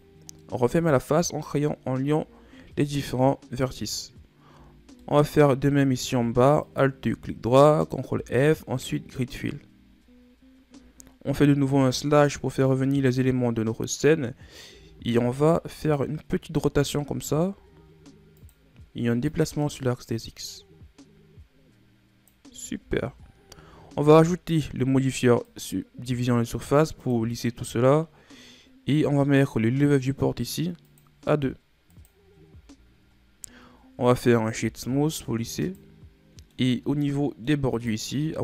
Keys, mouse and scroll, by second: 0.5-2.0 middle drag, 2.0-2.9 shift+scroll up 1, 4.9 shift+scroll down 2, 5.1 middle click, 5.7-6.8 scroll up 2, 6.8 alt+right click, 8.3 ctrl+f, 10.2-11.9 scroll down 5, 11.9 KP_Divide, 14.8 a, 15.3 a, 16.8 r, 19.4-22.5 drag, 22.9 Tab, 23.4-23.9 scroll down 3, 23.9-24.3 ctrl+scroll up 3, 25.6-28.6 drag, 31.0-32.9 drag, 32.9-33.3 ctrl+scroll down 2, 33.3-33.8 scroll up 3, 33.8-34.7 ctrl+scroll down 4, 34.7 w, 35.9 shift+scroll down 3, 36.4-36.9 middle drag, 36.9-37.3 ctrl+scroll up 2, 37.3-37.9 middle drag, 37.9 right click, 38.3 Tab.